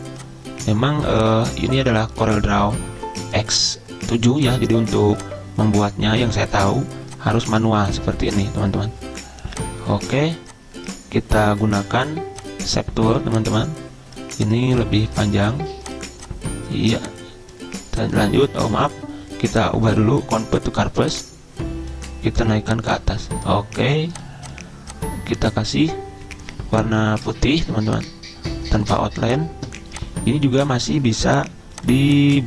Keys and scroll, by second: 18.7 ctrl+z.